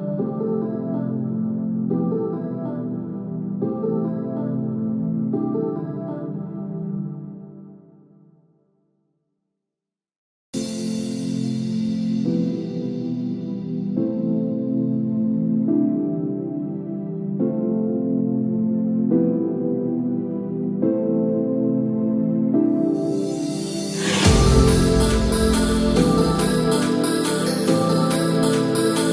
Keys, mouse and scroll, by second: 4.6 i, 7.0 middle click, 8.5 click, 9.6 space, 14.3 click, 15.7 scroll down 2, 15.9 middle click, 17.3 shift+middle click, 17.8 shift+middle click, 18.9 scroll down 1, 19.3 middle click, 20.4 middle click, 20.4-21.1 scroll up 1, 24.4 ctrl+s.